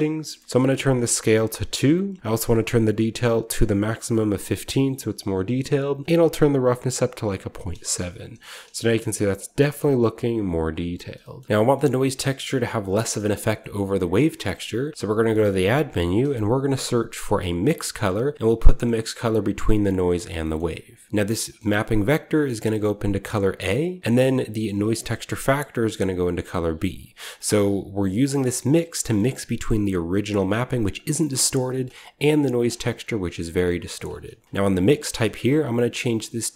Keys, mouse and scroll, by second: 0.2-2.2 scroll up 1, 0.3 middle click, 0.9 click, 1.3 2, 2.5-3.3 scroll up 1, 3.3 click, 3.3-3.9 scroll up 1, 3.9-4.8 scroll up 1, 5.7 click, 5.7 typing, 6.1-8.6 drag, 7.9-11.4 shift+middle drag, 7.9-10.2 shift+scroll up 1, 10.2 shift+scroll up 1, 10.8-11.4 scroll down 1, 11.7-12.1 middle drag, 12.3-12.8 scroll up 1, 13.1 scroll up 1, 13.2 scroll down 1, 14.0 click, 14.8-15.7 typing, 17.5 click, 19.3 click, 20.0-21.4 drag, 20.1-21.1 scroll down 1, 21.7 click, 22.8 drag, 23.4-23.8 drag, 24.0-25.2 drag, 25.9-26.2 drag, 26.4-26.8 drag, 27.0 drag, 27.2-28.3 scroll down 1, 27.3-29.1 middle drag, 28.3-30.7 scroll up 1, 29.4-30.7 drag, 29.4 typing, 31.1 middle click, 31.3-32.5 scroll up 1, 31.6 middle click, 31.9 typing, 32.1 click, 32.4 click, 32.5 middle click, 32.9 middle click, 33.7 click, 33.7-35.0 scroll up 1, 33.7-34.5 typing, 34.6 click.